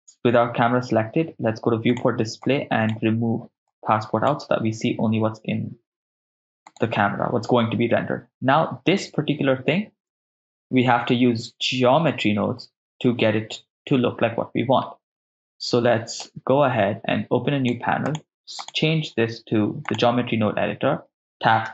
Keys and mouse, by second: 1.9 click, 2.4 click, 3.7 click, 6.7-8.9 drag, 6.7 right click, 16.2-17.8 drag, 18.1-20.1 drag.